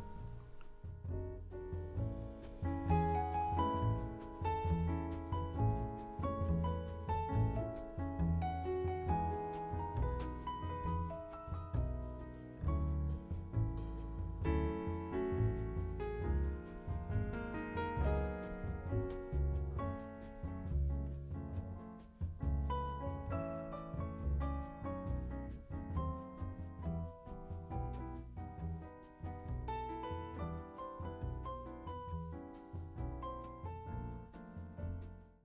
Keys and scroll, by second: 0.7 Up.